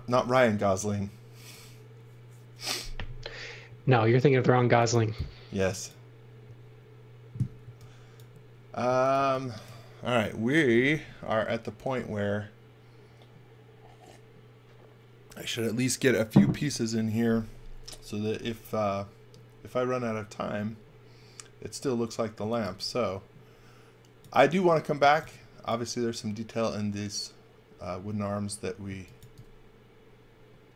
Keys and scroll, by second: 3.6 x, 4.6 x, 4.9 v, 7.6 x, 8.8 x, 9.1 v, 22.1-23.1 typing, 24.7-26.0 typing, 28.8 x, 29.1 v.